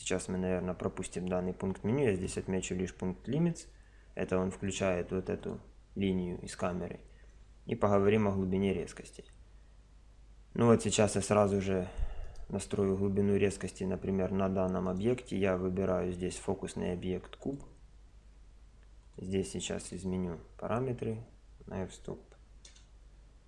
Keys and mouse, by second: 2.2 click, 3.5 KP_0, 4.6-7.1 drag, 12.2-14.0 right drag, 14.9-17.8 right drag, 16.2 click, 19.0 click, 22.7 KP_0.